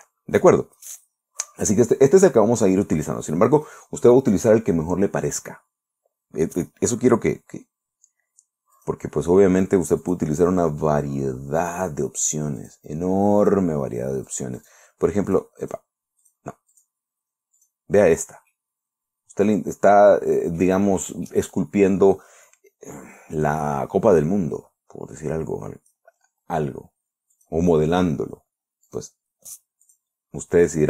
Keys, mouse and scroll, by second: 4.0 click, 9.2 click, 10.5 click, 12.1 click, 13.1 click, 13.8 click, 14.8 click, 15.8 click, 16.1 click, 16.7 click, 17.2 click, 18.0 click, 19.0-21.2 middle drag, 21.4 scroll down 2, 21.8 click, 25.4 scroll up 2, 27.8 click, 29.4 click, 30.3 click.